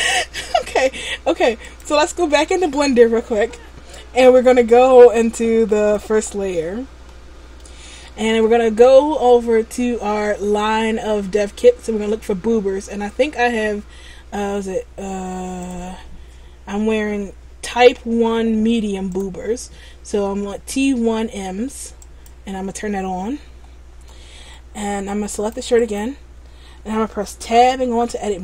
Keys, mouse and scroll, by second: 5.8 shift+click, 7.2 middle click, 22.1 click, 24.2 middle click, 25.5 right click, 26.0 right click, 27.6 Tab.